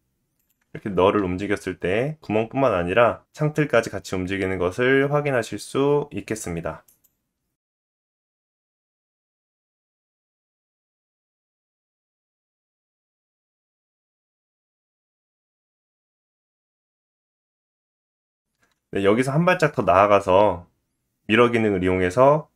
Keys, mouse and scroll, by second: 0.4 click, 1.2 g, 12.5 s, 16.1-22.5 middle drag, 16.8 s.